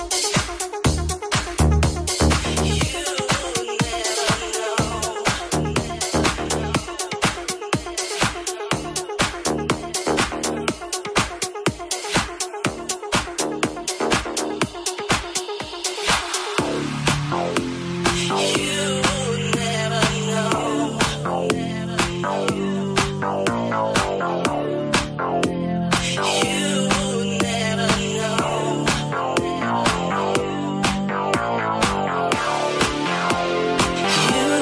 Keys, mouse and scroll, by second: 0.3 ctrl+middle click, 1.2 ctrl+a, 1.7 Tab, 2.1 ctrl+a, 2.6 Tab, 3.0 ctrl+middle click, 3.7 right click, 3.8 shift+middle click, 3.9 right click, 4.0 middle click, 4.2 right click, 4.2 middle click, 4.4 right click, 4.4-12.0 shift+middle drag, 6.1-8.9 typing, 10.6 g, 11.9 2, 12.0 alt+right click, 12.1-14.3 alt+middle drag, 12.4 g, 13.8 1, 14.3 right click, 14.3-25.8 middle drag, 17.9 e, 19.6 s, 20.8 g, 22.9 g, 24.2 g, 24.3 g, 26.0 alt+middle click, 27.2-31.6 alt+middle drag, 31.0 ctrl+shift+click, 31.3 ctrl+KP_Add, 31.7-34.6 middle drag, 33.1 g.